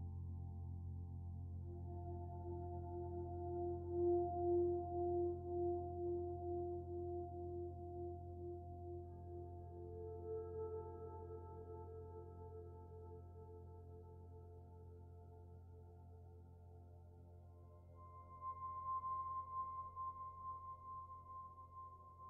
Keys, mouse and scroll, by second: 3.3 g, 8.3 shift+middle click.